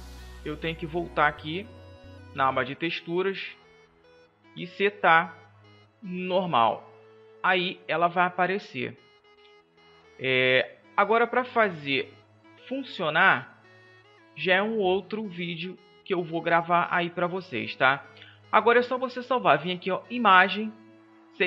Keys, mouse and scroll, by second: 6.7 Tab, 16.0 middle click.